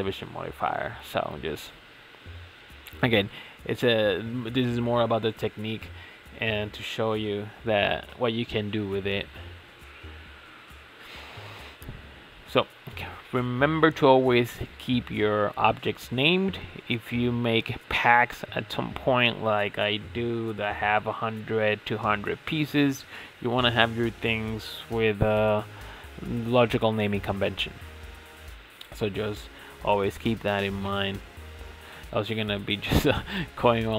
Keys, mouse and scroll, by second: 3.2 click, 4.2-4.6 shift+middle drag, 4.6-5.7 scroll down 6, 5.7-6.3 shift+middle drag, 6.3 g, 8.4 Delete, 9.2 click, 10.1 g, 11.1 click, 11.5 click, 12.5 shift+o, 13.9 click, 14.0-17.2 drag, 17.2 click, 17.4-19.5 drag, 19.9 click, 20.0 click, 25.6 ctrl+a, 27.2-27.7 scroll up 6, 27.7-29.1 shift+middle drag, 29.1-30.5 scroll down 2, 30.5 ctrl+s, 31.8 Tab, 32.2 Tab, 32.8 click, 33.5 shift+click.